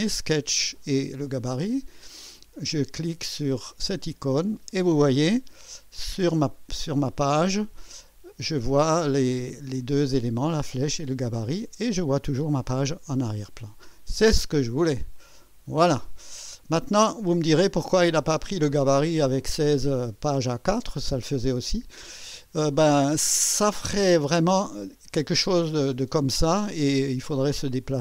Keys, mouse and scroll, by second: 3.7 click, 6.0 click, 15.2 click, 16.5 scroll down 2, 25.0-26.7 scroll down 8.